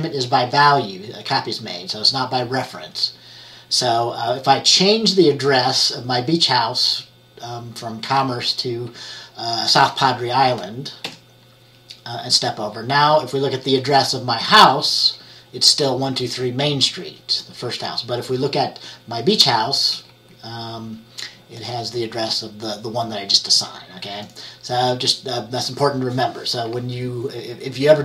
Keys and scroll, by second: 11.1 F10, 13.2 F10, 20.0 F10.